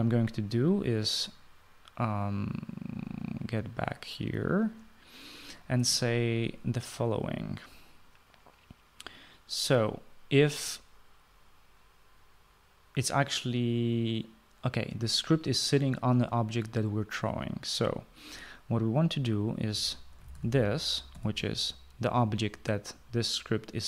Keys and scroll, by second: 20.2-22.1 typing.